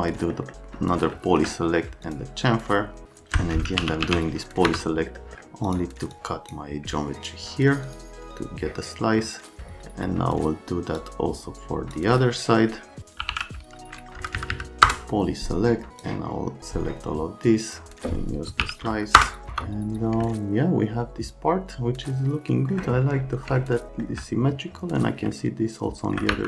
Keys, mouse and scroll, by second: 0.3 right click, 1.1 alt+middle click, 2.0 click, 3.0 alt+middle click, 3.6-4.5 typing, 4.6 F3, 5.2 middle click, 5.6 click, 6.1 click, 7.9 click, 9.9 right click, 11.0 click, 13.0-13.8 typing, 14.2 Down, 14.3 Down, 14.5 Down, 14.9 Return, 15.9 click, 18.2-19.1 typing, 19.2 Return, 19.5 F3, 20.3 alt+middle click, 23.6 alt+middle click, 25.4 alt+middle click.